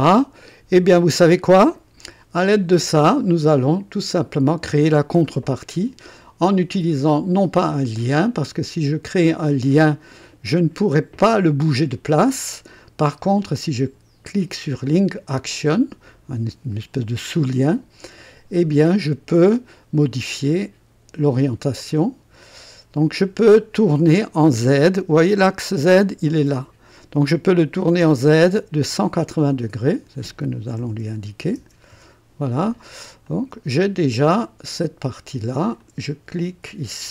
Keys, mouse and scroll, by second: 3.0 click, 4.5 click, 17.3 click, 19.3 click, 21.3 click, 22.0 click, 25.3 click, 29.6 click, 30.8 KP_1, 31.1 KP_8, 31.5 KP_0, 31.9 Return, 33.2 click, 35.7 click.